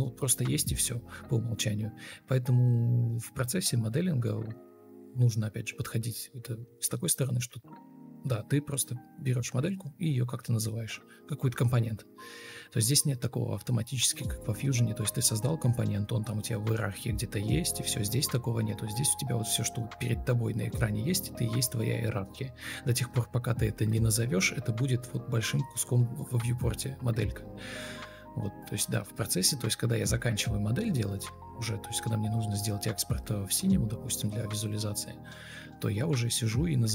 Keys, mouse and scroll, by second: 0.1 ctrl+click, 2.8 Escape, 3.0 ctrl+z, 4.2 ctrl+click, 4.6 ctrl+double click, 7.2 ctrl+z, 9.8-10.6 typing, 19.3 ctrl+Delete, 20.0 ctrl+z, 20.4 Delete, 21.1 Delete, 22.3-23.1 typing, 27.6 ctrl+space, 29.0 alt+shift+c, 29.2 ctrl+click, 33.2 shift+click, 33.8 ctrl+d, 34.5 Delete, 36.6 ctrl+click.